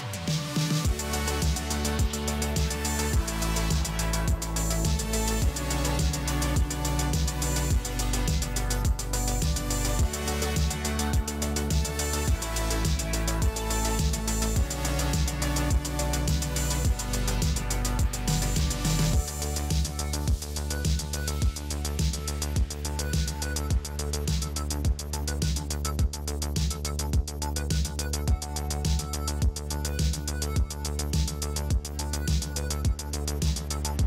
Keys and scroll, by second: 4.7 space, 18.9 space, 22.5 ctrl+space, 22.8 ctrl+space.